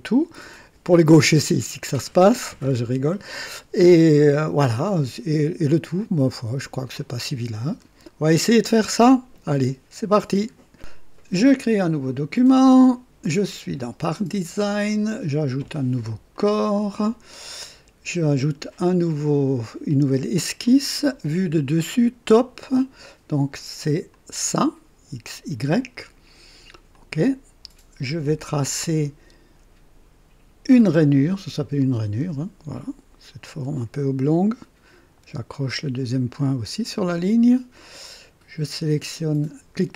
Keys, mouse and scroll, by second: 3.1-4.0 drag, 4.6-6.8 drag, 6.9 click, 12.0 click, 16.3 click, 20.6 click, 24.1 click, 26.9 click, 31.8 click, 33.4 click, 36.3 click, 37.8 right click.